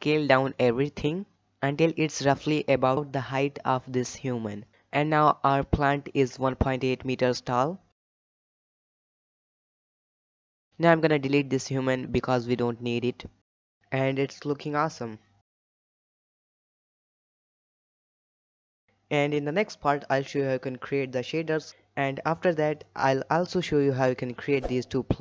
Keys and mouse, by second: 0.6-1.5 shift+middle drag, 2.3 s, 8.7 click, 9.5 shift+middle drag, 10.1 g, 11.1-11.8 middle drag, 12.2 x, 12.8-13.3 shift+middle drag, 14.2 n, 15.5 click, 15.9-16.4 middle drag, 16.9-17.2 middle drag, 17.3 middle drag, 17.6-18.0 shift+middle drag, 18.1-21.0 middle drag, 21.5 middle click, 22.6-23.3 shift+middle drag.